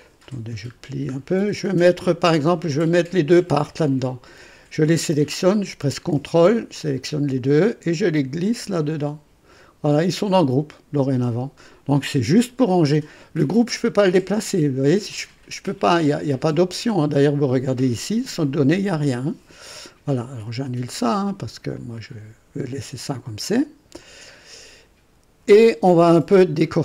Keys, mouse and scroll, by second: 0.0 click, 0.8-1.2 scroll down 2, 2.7 click, 6.8 ctrl+click, 8.4-9.7 drag, 14.0 click, 14.5 right click, 16.8 click, 18.8 click, 20.6 click, 21.8 click, 24.0 click.